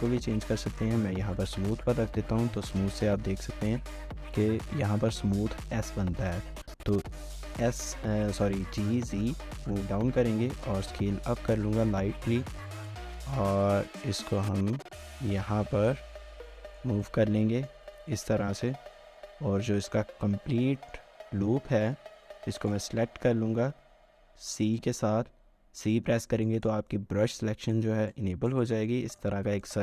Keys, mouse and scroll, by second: 1.3 typing, 4.3 typing, 4.4 right click, 6.3 typing, 10.5-11.6 scroll down 1, 11.6-13.7 scroll, 13.7-14.4 scroll up 1, 14.4-16.7 scroll, 16.4-17.2 typing, 17.0 middle click, 18.6-19.1 typing, 20.5 middle click, 22.6 alt+click, 23.9-25.2 scroll down 1, 26.5 right click, 26.9 middle click, 27.8 c, 28.6 right click, 28.9 middle click, 29.3 c.